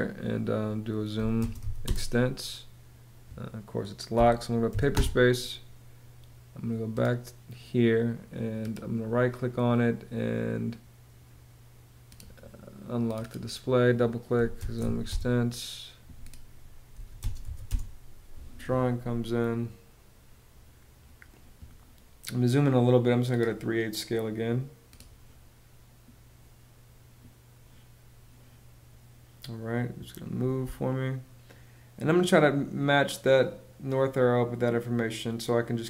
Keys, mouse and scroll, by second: 0.7 z, 1.0 space, 1.2 e, 1.4 space, 3.7 p, 4.3 s, 4.5 space, 13.9-18.1 typing, 30.2 space.